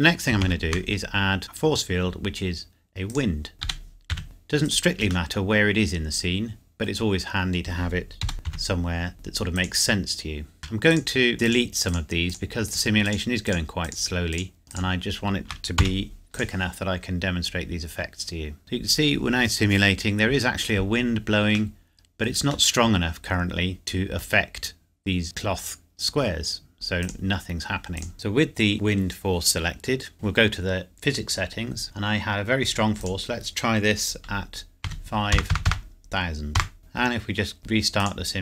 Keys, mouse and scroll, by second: 0.3 shift+Num_Lock, 0.3 scroll down 1, 0.4 shift+a, 3.1 click, 3.6 g, 4.1 z, 4.6 click, 5.3 middle click, 8.2 g, 8.4 z, 9.6 click, 10.9 click, 11.3 shift+click, 15.8 x, 16.3 click, 17.2 scroll up 1, 17.6 scroll down 1, 18.6 click, 21.7 middle click, 24.2 scroll up 1, 27.0 click, 30.1 click, 33.3 click, 34.8 KP_5, 35.3 KP_0, 36.5 KP_Enter, 37.6 click.